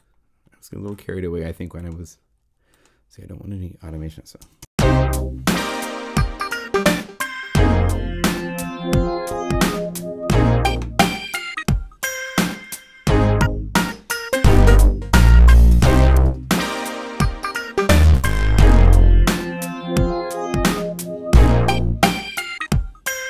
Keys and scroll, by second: 4.4 0, 4.6 Home.